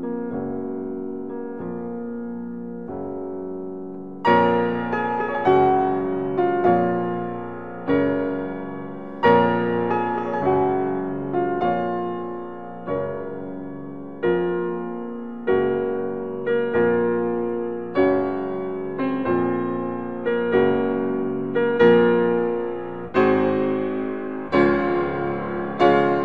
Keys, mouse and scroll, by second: 0.8 click, 2.8 middle click, 8.2-10.8 middle drag, 10.8 click, 13.7 ctrl+r, 20.0 click.